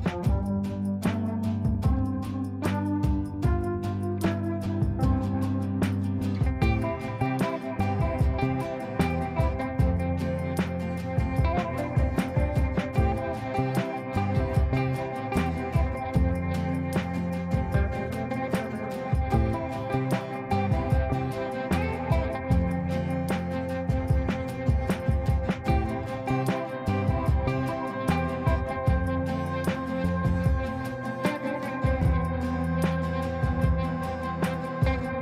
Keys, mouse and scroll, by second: 0.0 shift+s, 1.1 shift+i, 1.7 shift+o, 2.1 shift+n, 2.6 ctrl+space, 4.3 click, 8.5-11.4 drag, 11.4 space, 14.9-20.8 drag, 22.9-28.4 drag, 28.4 space, 29.5-34.8 drag, 34.8 ctrl+space.